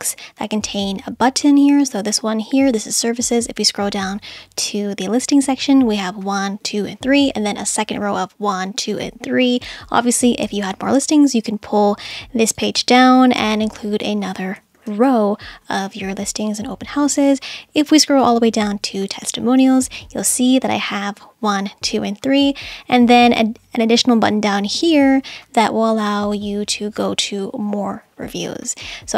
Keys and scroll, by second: 15.0 super+z.